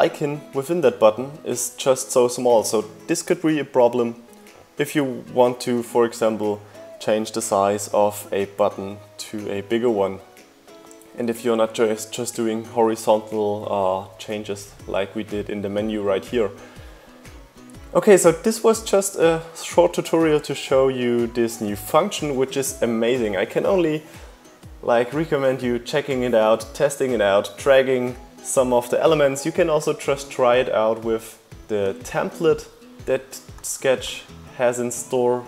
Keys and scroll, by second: 0.9 BackSpace.